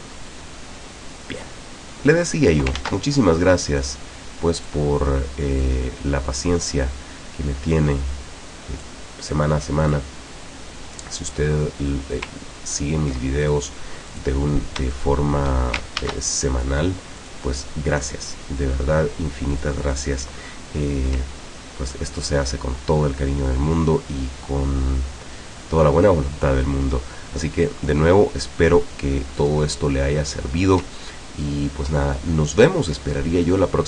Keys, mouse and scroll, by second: 1.4-2.7 drag, 2.8 ctrl+z, 3.9 click, 5.7-9.1 drag, 9.9 click, 11.9 click, 12.5-13.0 ctrl+scroll down 2, 13.5 ctrl+click, 14.1 click, 14.9 shift+click, 16.0 ctrl+shift+a, 17.2 click, 17.9 click, 19.5-20.2 drag, 21.9 ctrl+scroll up 2, 28.7-29.4 ctrl+scroll down 4, 29.8 ctrl+click, 31.1 ctrl+scroll down 2.